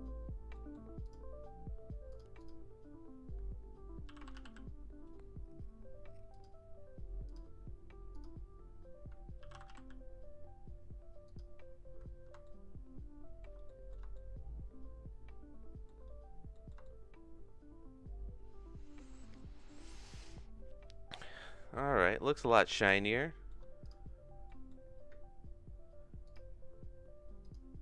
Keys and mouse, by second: 0.5 middle click, 1.0 click, 2.1 click, 2.4 click, 8.1 click, 12.4-13.4 shift+middle drag, 13.6 middle click, 14.1-15.8 shift+middle drag, 16.5 middle click, 16.8-19.0 shift+middle drag, 21.5 middle click, 22.2-23.4 shift+middle drag, 23.8 click, 24.4 middle click, 26.2 click, 27.4 click.